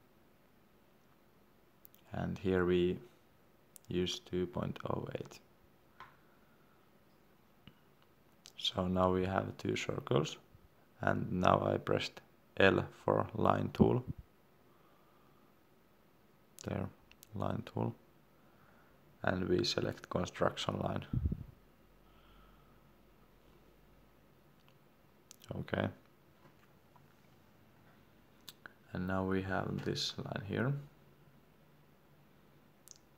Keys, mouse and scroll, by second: 4.8 2, 7.3 Return, 8.9 middle click, 10.1 l, 14.7 Escape, 17.1 click, 26.9 scroll down 1, 29.6-30.0 scroll up 1, 30.7 Escape.